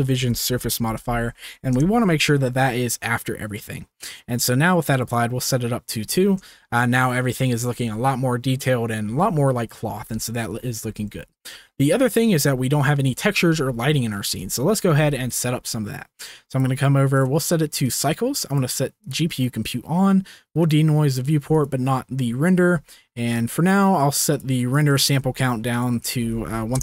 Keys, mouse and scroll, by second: 6.0 middle click, 6.5-6.9 shift+middle drag, 7.1 middle click, 7.4 shift+middle click, 9.1-10.4 middle drag, 11.0 ctrl+s, 12.1 drag, 12.5 z, 14.1-17.1 shift+middle drag, 17.1-18.0 drag, 18.0 middle click, 18.5-19.4 drag, 20.6 click, 21.5 click, 24.4 click, 25.3 ctrl+click, 26.1 click, 26.6 click.